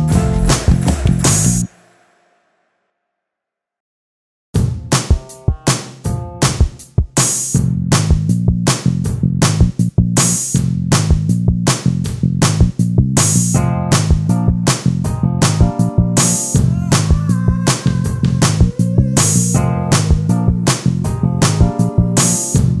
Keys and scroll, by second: 5.3 t, 9.8 ctrl+space, 12.4 space, 14.5 j, 16.6 t, 18.2 ctrl+space, 21.0 space, 22.2 ctrl+space, 22.7 v.